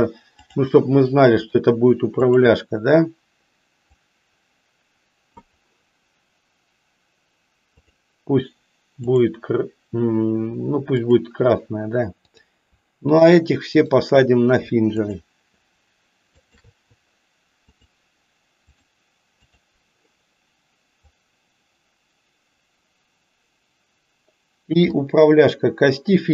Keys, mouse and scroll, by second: 0.4-1.6 drag, 2.4 click, 3.9-5.2 drag, 10.9 click, 13.1 shift+click, 13.7 shift+click, 15.0 shift+click, 16.3 shift+click, 17.7-18.9 drag, 19.6 click, 21.0-25.0 drag.